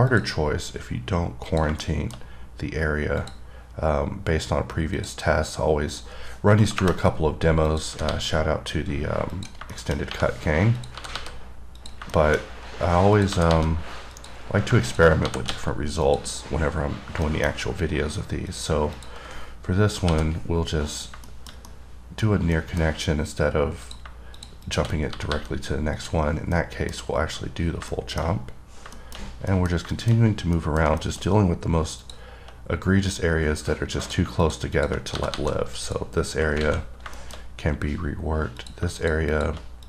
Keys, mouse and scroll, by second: 0.3 click, 1.7 click, 2.1 middle click, 3.4 click, 5.2 click, 6.1 click, 7.9 click, 9.6 click, 10.0 middle click, 10.2 scroll up 1, 11.0 click, 12.0 click, 12.4 middle click, 12.7 scroll up 2, 13.4 click, 14.4 click, 15.1 click, 16.3 click, 16.7-17.4 scroll down 1, 17.5 middle click, 18.1-18.7 scroll up 2, 18.7 click, 19.2 click, 21.2 click, 21.5 middle click, 22.0 double middle click, 22.8 middle click, 24.1 click, 24.6 click, 24.9 click, 26.2 click, 26.6 scroll down 1, 26.8 middle click, 28.2 middle click, 29.2 middle click, 29.4-29.8 scroll down 3, 29.8 middle click, 30.2 middle click, 30.4 scroll up 3, 30.8 middle click, 31.3 middle click, 32.3 click, 34.3 click, 34.7 click, 35.0 click, 36.0 click, 37.2 scroll down 2, 37.4 middle click, 37.6 scroll up 3, 38.8 click, 39.2 click, 39.6 click.